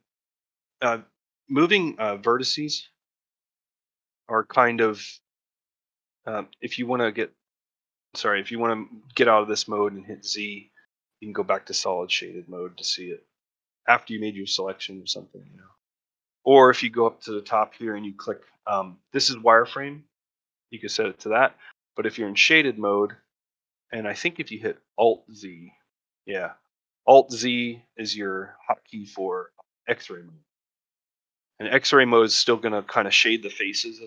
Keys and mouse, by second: 1.5-2.6 middle drag, 3.2-4.5 middle drag, 12.0 middle click, 13.4 middle click, 14.3 ctrl+middle click, 15.4 middle click, 20.1 click, 21.5 click, 31.3 ctrl+middle click, 31.6 middle click, 32.1 shift+middle click, 33.1 middle click, 33.5 shift+middle click.